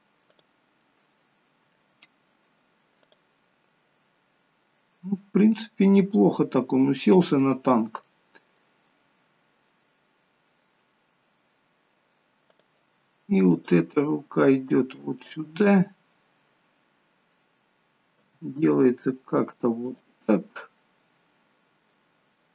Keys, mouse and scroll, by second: 0.4 middle click, 0.4 click, 0.9 middle click, 3.0 click, 3.7 middle click, 8.1 middle click, 8.9-9.6 scroll up 2, 9.6 middle click, 9.6-11.0 scroll up 1, 12.6 click, 13.5 click, 13.9 g, 18.2 r, 20.4 middle click.